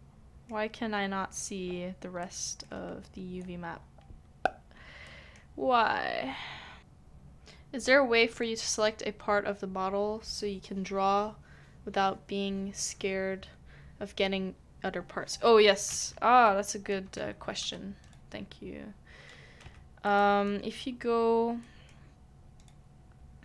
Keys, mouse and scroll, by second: 3.4-3.7 scroll down 1, 3.7-5.0 scroll up 1, 5.0 scroll down 1, 5.0 middle click, 16.6 middle click, 17.1 Tab, 19.6 Tab, 19.6 Tab, 20.0 middle click.